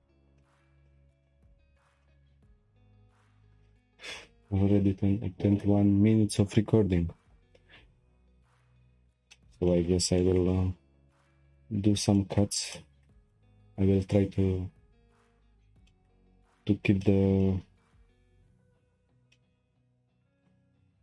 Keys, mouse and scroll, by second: 0.4-5.1 shift+middle drag, 9.3-10.6 shift+middle drag, 10.6-11.1 scroll up 5, 11.1-14.9 shift+middle drag, 14.9-15.4 scroll up 4, 15.4-15.9 scroll down 4, 15.9-16.3 shift+middle drag, 16.3 scroll down 1, 16.5 click, 17.0-18.0 shift+middle drag, 18.0 click, 18.8 Tab, 19.3-20.4 middle drag, 20.4 click.